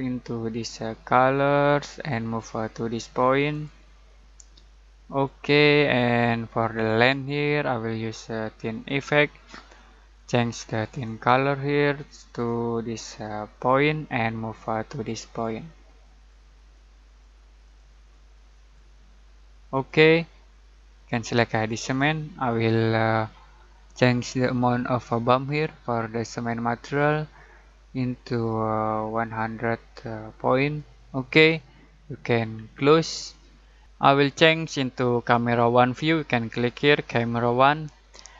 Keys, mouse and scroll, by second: 24.3-30.8 alt+drag, 35.2 alt+click, 37.6 alt+click.